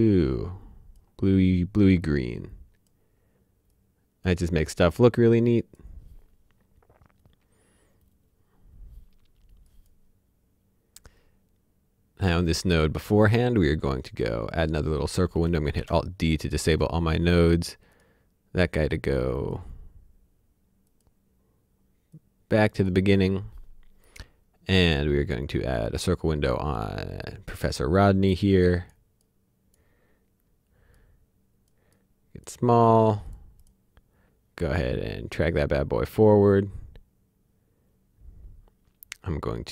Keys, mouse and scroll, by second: 9.6 click, 12.5 click, 15.6 alt+Num_Lock, 15.7 d, 17.9 click, 19.3 click, 20.8 click, 24.8 click, 35.5 click.